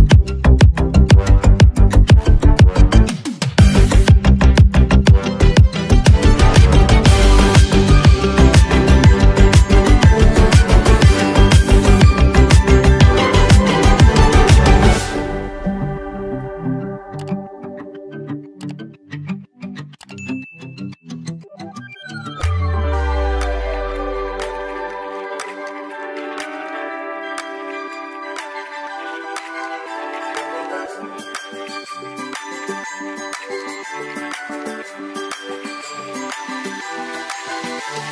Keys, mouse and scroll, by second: 5.7 click, 10.1-38.1 drag.